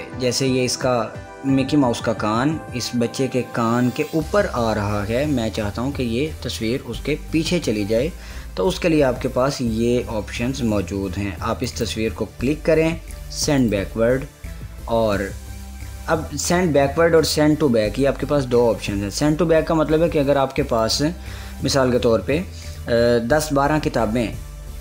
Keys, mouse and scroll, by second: 12.4 click, 14.3 click, 21.5 click.